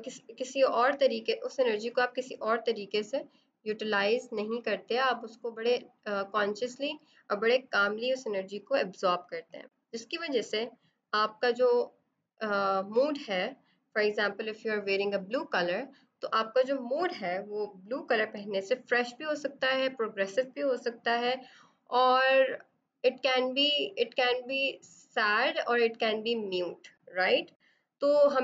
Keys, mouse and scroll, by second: 1.2 ctrl+z, 3.6 alt+click, 27.1 right click.